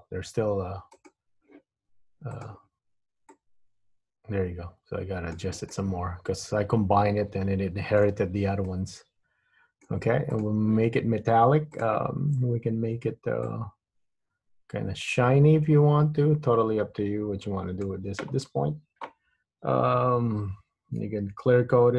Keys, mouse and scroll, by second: 1.1 click, 2.5 click, 3.4 click, 5.9 middle click, 8.8 middle click, 10.5 click, 12.0 click, 13.6 click.